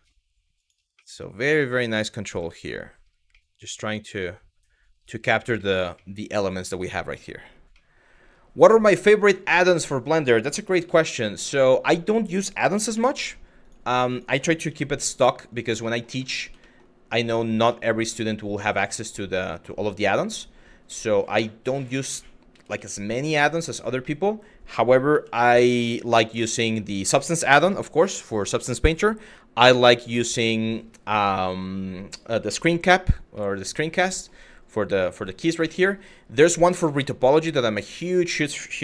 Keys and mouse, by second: 0.2 click, 0.7 middle click, 1.4 shift+middle click, 2.0 middle click, 3.1-4.6 middle drag, 4.9 middle click, 5.3 shift+middle click, 5.6 middle click, 7.5 middle click, 8.5 middle click, 9.4 click, 9.8 middle click, 10.1 g, 10.4 y, 11.3 click, 11.7 click, 13.2 click, 15.1 click, 15.5 shift+middle click, 15.9 middle click, 16.3 shift+middle click, 16.9 middle click, 17.4 shift+middle click, 17.8 middle click, 18.6 shift+middle click, 19.0 middle click, 20.0 middle click, 20.6 middle click, 21.6 click, 22.1 g, 22.4 y, 23.3 click, 23.6 middle click, 24.7 g, 25.7 click, 26.1 shift+middle click, 33.0 middle click, 35.4 middle click, 36.2 middle click, 36.8 shift+middle click, 37.1 middle click, 38.6 g.